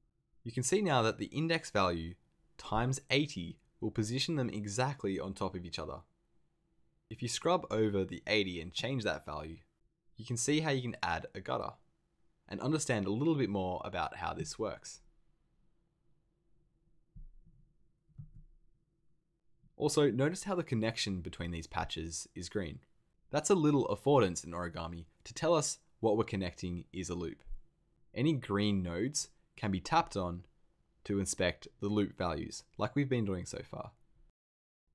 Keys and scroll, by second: 18.1 super+z.